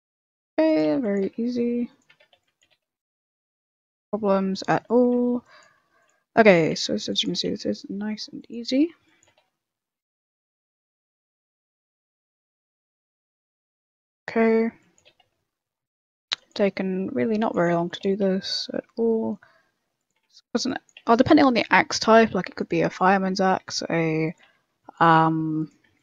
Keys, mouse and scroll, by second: 0.0-2.6 typing, 4.7 shift+middle click, 5.3-7.3 typing, 6.4 shift+middle click, 8.6 a, 9.0 b, 9.2 g, 10.3-11.6 typing, 11.0 shift+middle click, 14.2 a, 14.7 b, 15.0 g, 16.2-18.0 typing, 16.7 shift+middle click, 20.1 a, 20.4 b, 21.7 e, 22.9 shift+middle click, 23.6-26.0 typing.